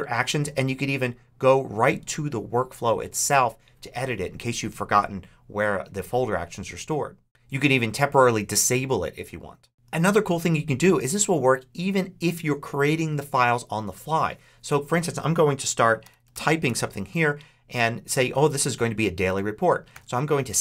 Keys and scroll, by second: 15.6-17.0 typing, 19.8 super+s.